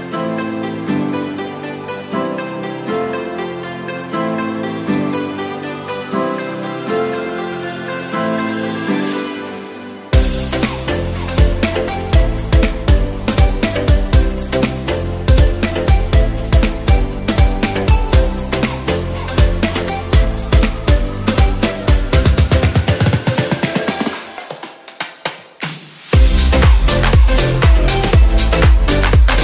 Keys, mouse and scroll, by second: 4.6 ctrl+z, 6.7 ctrl+z, 9.0 ctrl+z, 10.3 ctrl+z, 24.8 ctrl+z.